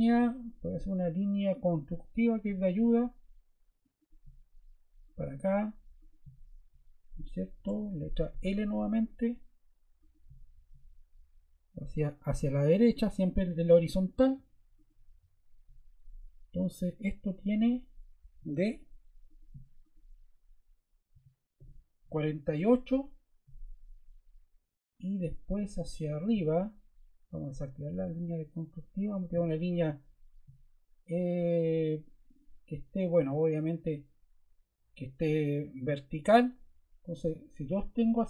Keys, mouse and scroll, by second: 8.3 scroll, 18.3 d, 21.3-23.6 typing, 26.0 click, 29.0 click.